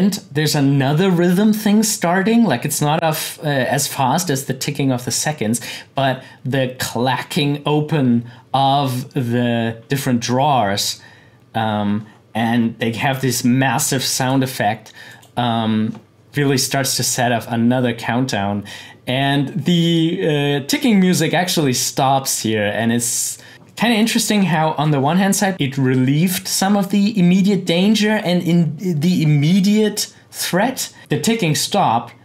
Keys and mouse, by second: 12.8-15.1 drag, 23.5 click.